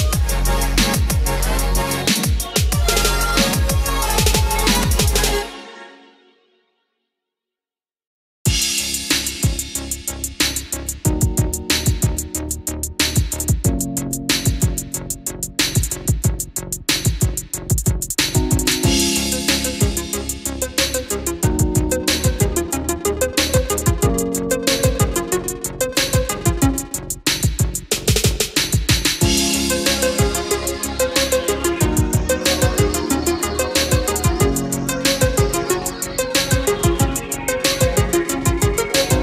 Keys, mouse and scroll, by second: 0.2 click, 0.5 scroll down 1, 1.2-1.7 scroll up 1, 2.3 ctrl+click, 2.6 scroll down 1, 4.7-11.7 drag, 12.0 scroll down 1, 12.3 middle click, 13.8 scroll up 1, 14.7 click, 15.3 shift+click, 17.1 ctrl+click, 18.6 click, 22.6 middle click, 23.9 scroll down 1, 24.3 middle click, 25.4 scroll up 1, 26.3 click, 26.7 middle click, 28.1 ctrl+click, 29.0 click, 32.6 KP_5, 34.2 KP_0, 34.7 click.